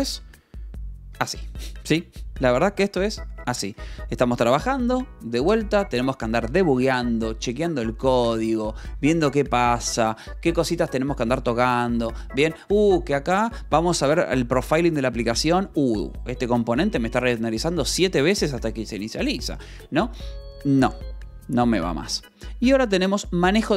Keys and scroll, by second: 4.2 Escape, 20.9 j, 21.9 k, 23.5 shift+v.